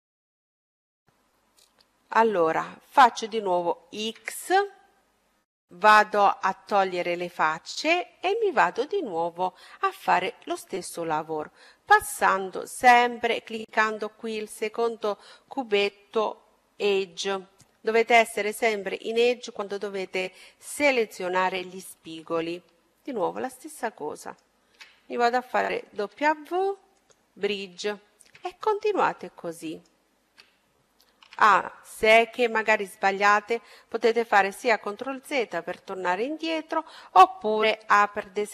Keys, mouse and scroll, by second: 3.8 x, 11.8-13.6 drag, 23.2-25.9 right drag, 25.9 w, 27.7-29.3 middle drag, 28.7-31.4 right drag, 31.2 a, 32.5-34.3 middle drag.